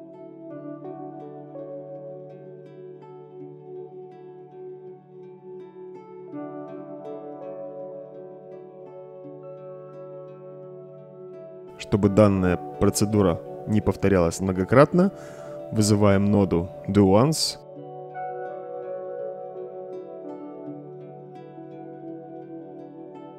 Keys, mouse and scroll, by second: 2.0 click, 3.0-3.5 drag, 4.1-5.5 drag, 6.0-6.7 drag, 7.4-8.1 drag, 9.6-10.3 drag, 11.1 click, 12.0-12.5 right drag, 16.7-17.2 drag, 18.6-20.4 typing, 21.2-22.5 drag, 23.2-23.3 right drag.